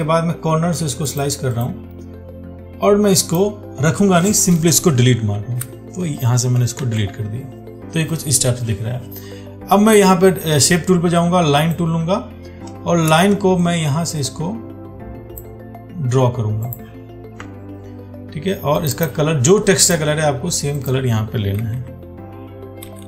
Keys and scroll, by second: 7.0 ctrl+d.